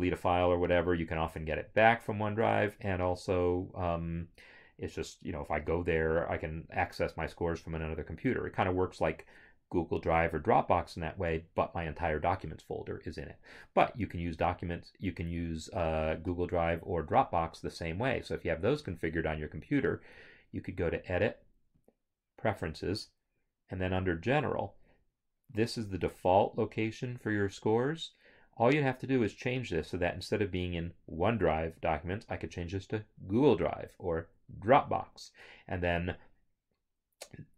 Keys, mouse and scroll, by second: 16.2 Escape, 18.3 click, 19.9 click, 21.8 click.